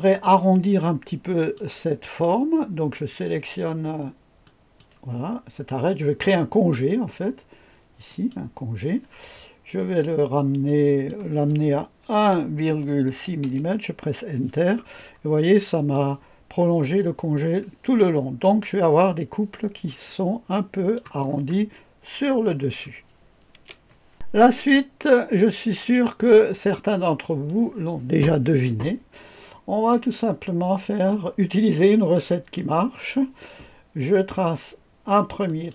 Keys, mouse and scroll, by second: 0.1-1.5 drag, 4.4 click, 8.0 click, 10.6 click, 12.1 KP_1, 13.0 KP_6, 13.4 Return, 15.1-15.9 scroll down 1, 15.5-15.9 right drag, 16.1 click, 18.1-19.8 scroll down 1, 19.8-21.0 drag, 21.2-22.2 scroll up 1, 22.2-23.5 scroll down 1, 23.5 scroll down 1, 23.5 KP_2, 24.1 click, 24.3-26.1 scroll up 1, 26.1-27.5 scroll down 1, 26.6-27.5 right drag, 29.8 click, 32.2 click, 35.4 click.